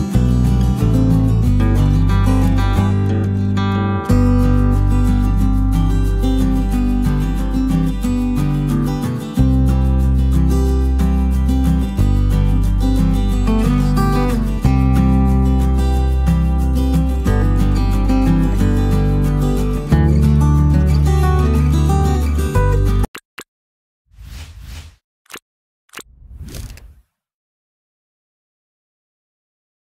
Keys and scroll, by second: 0.1 super+v, 5.3 Return, 10.1 super+s, 15.4-20.1 typing.